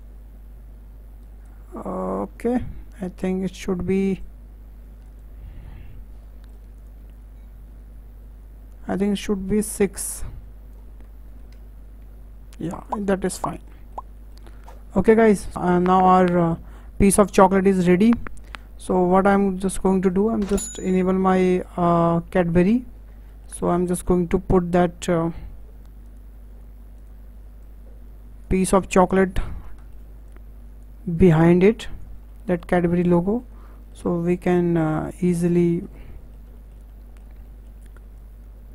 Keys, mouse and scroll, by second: 4.1-6.8 drag, 7.1 ctrl+z, 7.5 ctrl+z, 8.9-12.0 drag, 12.8 click, 13.1 scroll down 4, 13.2-15.2 middle drag, 15.2 scroll down 4, 15.5-18.0 shift+middle drag, 18.0-18.5 scroll down 2, 20.0-22.6 shift+middle drag, 22.6 click, 23.3 shift+middle click, 24.1 w, 26.0 click, 27.0 click, 27.6 click, 28.7-29.0 scroll up 4, 29.0 shift+middle click, 29.4-29.8 scroll up 6, 29.8-30.3 shift+middle drag, 30.3 click, 31.3 click, 32.3 middle click, 32.9-33.5 scroll up 4, 33.2 shift+middle click, 33.5 scroll down 4, 33.7-34.2 middle drag, 34.2 click, 35.3-35.7 scroll up 5, 35.7-38.2 shift+middle drag, 38.2 click.